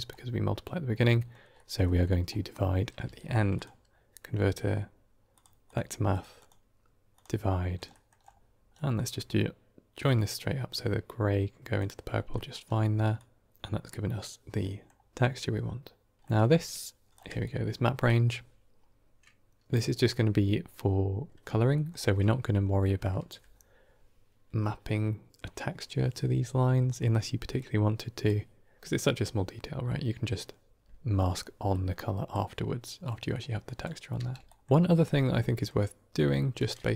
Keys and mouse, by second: 0.9 middle click, 1.5 middle click, 1.8 middle click, 2.9 shift+a, 6.0 click, 6.2-7.1 drag, 7.8 middle click, 8.6 middle click, 9.9-11.7 drag, 12.2 middle click, 13.0-13.5 drag, 14.5-14.8 middle drag, 16.2 middle click, 17.3-17.9 drag, 21.6 middle click, 26.8 middle click, 27.4-28.1 drag, 31.6 click, 33.0 middle click, 33.5 drag, 34.1 g, 34.6 middle click, 35.2 middle click.